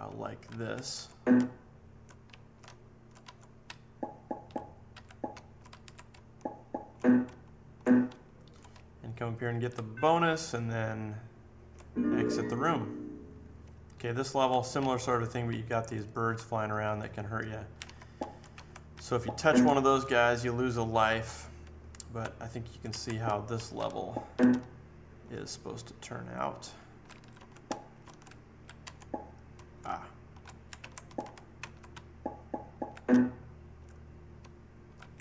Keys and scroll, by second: 0.0 Right, 0.8 Up, 0.9 Left, 1.3 Down, 1.8 Down, 2.2 Right, 2.2 Down, 2.6 Down, 3.2 Left, 3.6 Up, 4.2 Up, 4.3 Up, 4.5 Up, 5.3 Right, 5.6 Up, 6.1 Left, 6.5 Left, 6.7 Left, 6.9 Left, 7.2 Left, 7.7 Left, 8.0 Left, 8.7 Up, 9.2 Up, 9.3 Up, 9.5 Up, 9.6 Up, 10.1 Down, 10.6 Down, 10.7 Down, 10.9 Down, 11.0 Down, 11.2 Down, 11.3 Down, 11.4 Down, 11.6 Down, 13.5 Right, 13.9 Up, 14.7 Right, 15.5 Right, 15.9 Right, 16.1 Right, 16.2 Right, 16.3 Up, 16.7 Up, 16.9 Up, 17.1 Up, 17.1 Up, 17.3 Up, 17.5 Up, 17.7 Up, 17.8 Right, 18.1 Down, 18.5 Right, 18.9 Up, 19.6 Down, 21.5 Left, 22.1 Left, 22.7 Up, 22.9 Right, 23.2 Down, 23.5 Right, 23.7 Up, 24.2 Up, 24.5 Down, 24.9 Down, 25.1 Down, 25.2 Down, 26.4 Right, 26.9 Right, 27.1 Up, 27.3 Left, 27.6 Down, 27.9 Left, 28.2 Up, 28.7 Left, 29.5 Down, 29.8 Left, 30.3 Left, 30.7 Right, 30.7 Up, 31.0 Down, 31.2 Down, 31.5 Right, 31.9 Up, 32.3 Up, 32.5 Up, 32.6 Up, 32.7 Up, 32.8 Up, 33.1 Down, 33.5 Down, 33.7 Down, 34.3 Right, 34.8 Right, 34.9 Up.